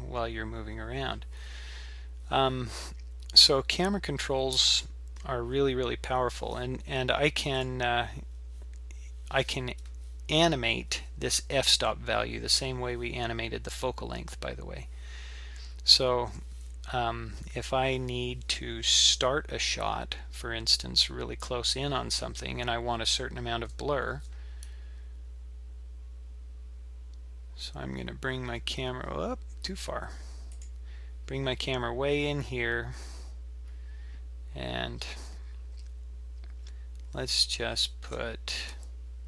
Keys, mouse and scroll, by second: 7.5 click, 37.9 shift+a.